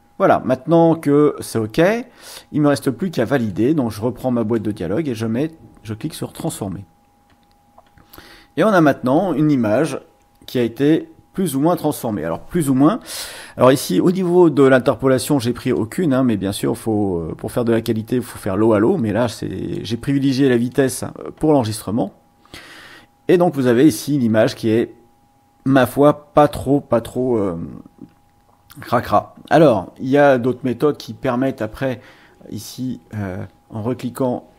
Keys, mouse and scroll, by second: 3.5-4.7 drag, 6.3 click, 8.1 click, 8.3 right click, 8.6 click, 9.3-10.4 middle drag, 10.4-10.8 ctrl+scroll down 2, 15.7-19.9 drag, 20.7 click, 26.3-27.2 scroll up 2, 28.5-29.0 ctrl+scroll up 2, 31.4 click, 33.1-34.5 drag.